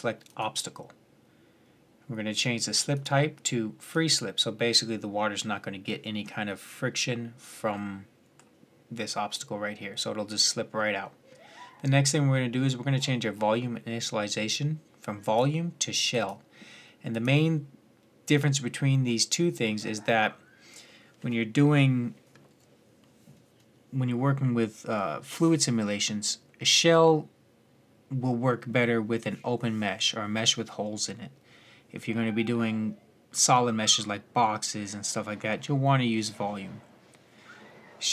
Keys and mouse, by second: 2.7-4.6 drag, 4.6-7.6 middle drag, 9.6-15.0 middle drag, 15.0-18.9 drag, 18.9-38.1 middle drag.